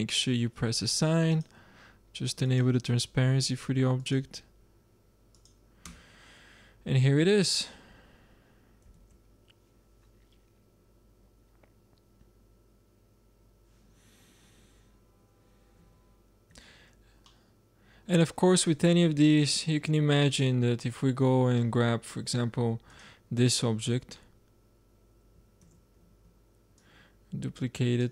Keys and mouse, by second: 2.0-3.0 drag, 3.9-5.8 drag, 5.8 Tab, 8.9 shift+z, 14.4-15.9 middle drag, 15.9 z, 16.4 z, 21.0 click, 21.6-22.1 drag, 23.6-24.7 drag, 24.7-25.5 middle drag, 25.5 shift+d, 27.2-28.1 drag.